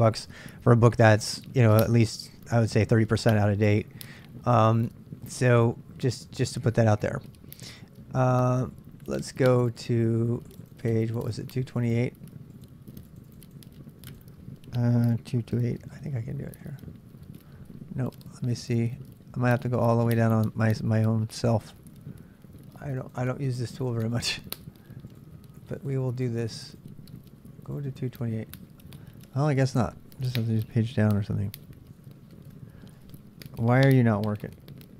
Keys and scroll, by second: 16.6 Return.